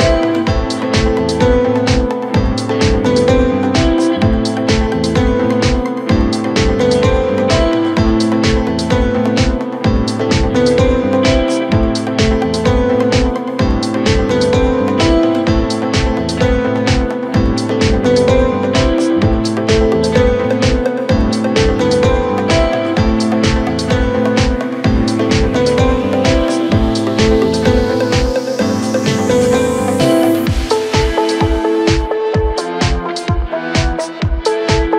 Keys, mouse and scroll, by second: 0.4 KP_7, 1.2-1.6 scroll down 1, 1.6 g, 4.8-6.2 middle drag, 6.2 Tab, 7.3 click, 7.9-8.8 middle drag, 8.8 scroll up 1, 9.0 Tab, 10.6 e, 12.9-13.2 scroll down 1, 13.2 Tab, 13.6-14.9 middle drag, 14.9-16.0 scroll up 2, 16.0-16.4 drag, 17.9 click, 18.2-18.7 scroll up 2, 18.7 KP_1, 20.5-24.9 drag, 24.9-25.3 scroll up 1, 25.3 Tab, 26.3 a, 27.2 s, 34.7-34.9 KP_4.